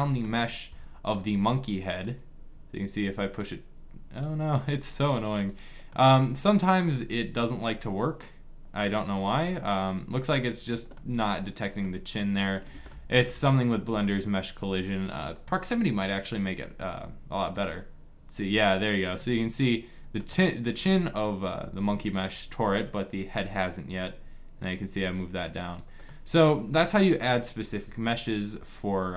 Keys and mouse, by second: 1.4-3.9 drag, 5.6-9.1 drag, 10.7 middle click, 13.7 middle click, 14.5 click, 15.2 middle click, 17.9-18.9 drag, 18.9-22.0 middle drag, 24.0 click.